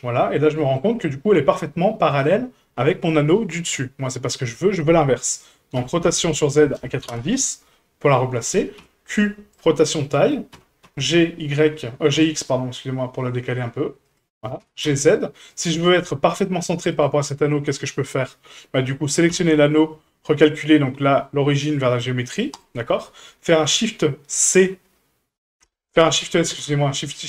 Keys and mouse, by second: 0.5 shift+middle click, 1.7-2.2 middle drag, 3.7-4.3 middle drag, 5.7 r, 8.8 q, 10.0-10.3 middle drag, 10.5 g, 14.6 g, 15.8 shift+middle click, 16.1-16.4 middle drag, 16.9 right click, 19.3 q, 26.5 shift+s.